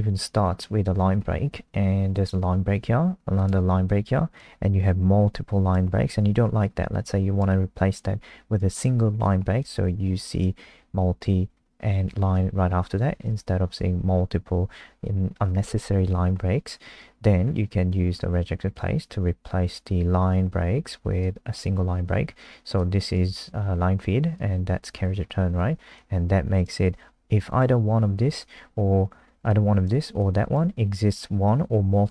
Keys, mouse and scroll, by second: 9.6 BackSpace, 13.2 ctrl+z, 16.6 scroll down 3, 17.1 scroll up 2, 21.2 click, 25.2-25.9 scroll up 1, 25.9 click.